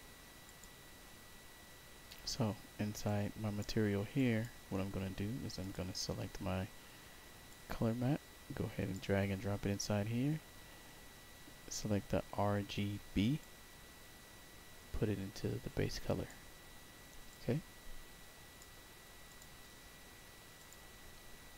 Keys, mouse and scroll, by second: 0.4 click, 3.0 click, 4.1 click, 5.5 click, 7.4-8.8 drag, 11.0 middle click, 11.1 middle click, 11.6 middle click, 12.1 middle click, 13.3-16.2 drag, 17.2-18.5 drag, 19.2 click, 19.8 scroll down 2, 20.5 click.